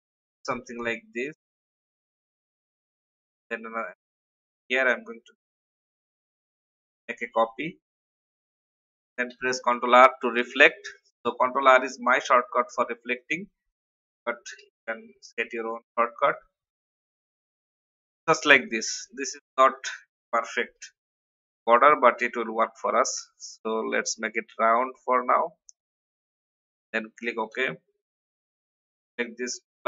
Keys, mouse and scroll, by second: 0.0-2.8 drag, 2.9-4.6 alt+drag, 5.8 ctrl+z, 6.6-8.4 alt+drag, 9.3 ctrl+r, 10.5 click, 11.5 shift+click, 13.2 click, 15.6 shift+click, 16.2 click, 21.7 ctrl+alt+f, 21.7 click, 24.9-25.3 scroll up 1, 26.8 click, 27.5 ctrl+x, 28.4 click.